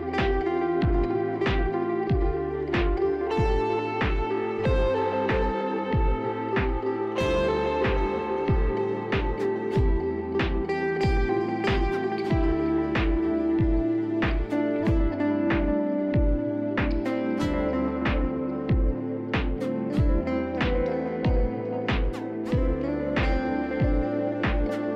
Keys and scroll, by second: 0.0 t, 6.7 s, 8.5 F4, 8.9 f, 13.3 ctrl+c, 18.0 f, 19.7 F4.